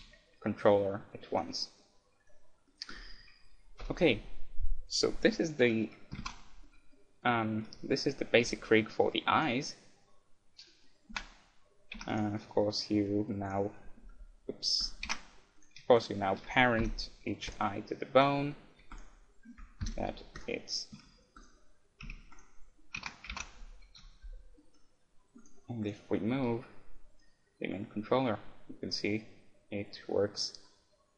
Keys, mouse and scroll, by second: 1.5 right click, 1.6-4.6 middle drag, 3.4 click, 3.8 KP_1, 6.2 ctrl+Tab, 6.6-8.0 middle drag, 8.0-11.4 right drag, 8.4 g, 11.2 Tab, 11.9 middle click, 12.0 Tab, 12.2 click, 12.2-17.9 right drag, 12.6-14.2 drag, 15.0 ctrl+Tab, 16.8 ctrl+p, 18.2-20.9 right drag, 19.8 ctrl+p, 21.0 a, 21.3-24.2 right drag, 22.0 a, 23.0 ctrl+Tab, 23.4 ctrl+Tab, 23.9 KP_1, 24.6 middle click, 25.4-27.6 right drag, 26.5 g.